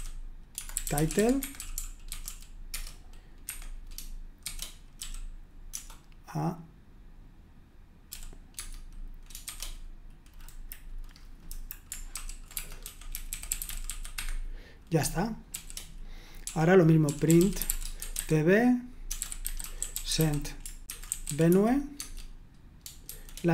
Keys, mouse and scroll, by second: 0.0-2.7 typing, 3.5 Escape, 4.2-5.0 typing, 8.1 typing, 8.6 Tab, 9.4 shift+', 11.5 Delete, 12.1-23.5 typing.